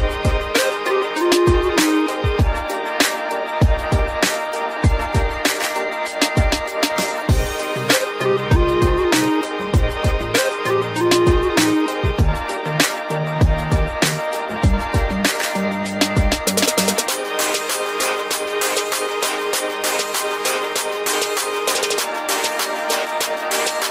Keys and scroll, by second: 0.1 ctrl+alt+z, 16.0 ctrl+t.